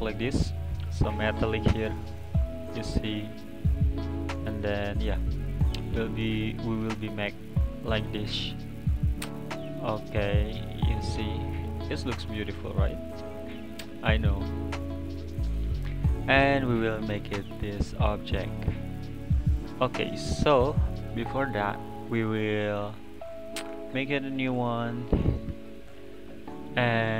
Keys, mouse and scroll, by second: 0.6 click, 1.0 scroll up 4, 1.5-2.2 middle drag, 2.2 scroll down 3, 2.7 click, 3.9 click, 4.2-8.3 middle drag, 11.4-15.2 middle drag, 15.2 click, 16.1-16.4 scroll down 4, 16.4-16.9 middle drag, 16.9-17.3 scroll up 4, 17.3-18.0 middle drag, 18.0 scroll down 3, 18.2 middle click, 19.1 scroll down 2, 19.3-19.9 middle drag, 19.9 click, 20.1 click, 20.7 click, 22.6-25.7 drag.